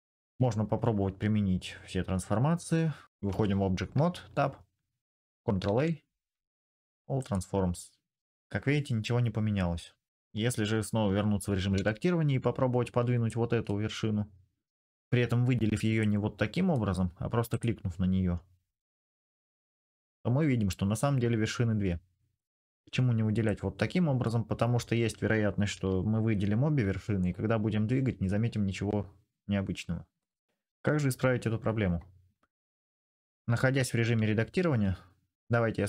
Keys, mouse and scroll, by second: 0.1-1.5 drag, 3.1 Tab, 5.4 ctrl+a, 11.5 Tab, 17.4-19.2 middle drag, 19.2 g, 22.4 middle click, 25.5 g, 27.5 click, 30.1 middle click, 31.9-35.8 drag.